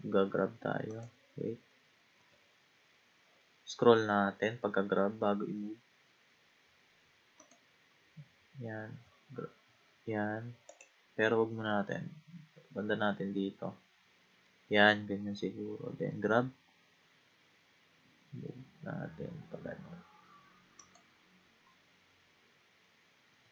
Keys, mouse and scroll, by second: 0.0 g, 2.2 g, 8.9 g, 11.7-14.8 middle drag, 16.1 g, 21.6 scroll up 1, 22.8-23.1 scroll down 2, 23.3 g.